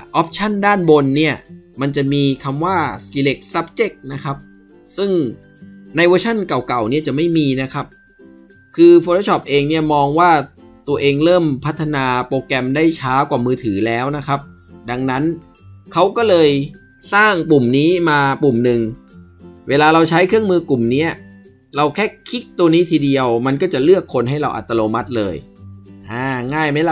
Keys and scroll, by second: 6.5 Escape.